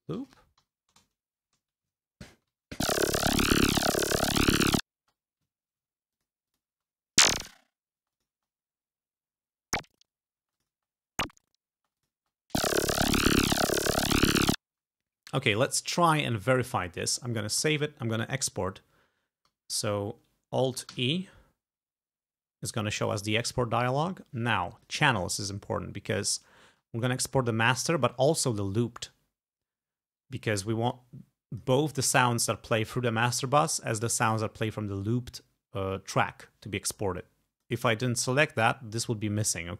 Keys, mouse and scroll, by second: 0.0-0.6 typing, 1.0 shift+Return, 2.3 ctrl+scroll down 2, 2.7 ctrl+space, 3.0 ctrl+scroll up 2, 4.0 g, 5.0 space, 5.5 ctrl+scroll down 2, 6.2 ctrl+click, 6.5 ctrl+click, 6.7 ctrl+space, 8.0 space, 8.2 click, 10.4 space, 10.6 click, 11.8 space, 12.0 click, 14.5 space, 15.3 scroll down 2, 15.9 click, 16.6 click, 16.8-17.2 scroll up 2, 17.6 ctrl+s, 20.9 alt+e, 24.8 click, 28.4 click, 31.0 click, 37.2 click, 38.3 click.